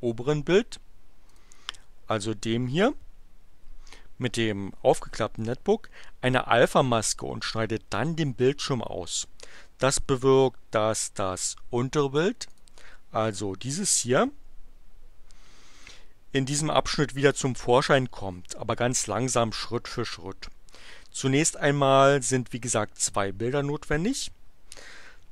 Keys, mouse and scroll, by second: 1.3 click, 12.5 click.